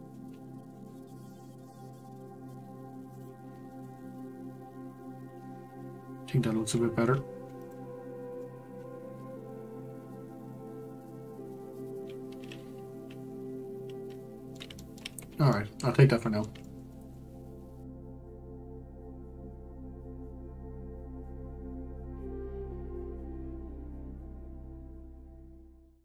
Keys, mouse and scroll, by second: 0.2 s, 3.5 scroll down 2, 3.7-6.9 middle drag, 7.2-7.6 scroll down 2, 7.6 click, 8.1-8.4 scroll up 1, 8.4-11.5 middle drag, 14.7-15.1 shift+middle drag, 15.1-15.4 scroll up 2, 15.5-17.3 middle drag, 17.3-26.0 scroll up 4.